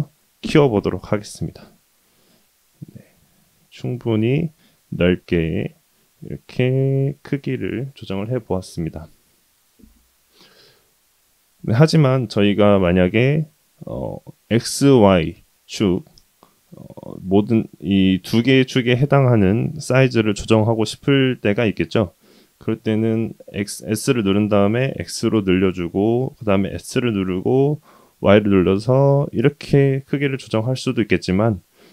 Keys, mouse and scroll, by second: 4.7-7.0 middle drag, 7.6-8.4 middle drag, 20.9-22.4 middle drag, 23.1 s, 26.6 s, 29.8-31.5 middle drag.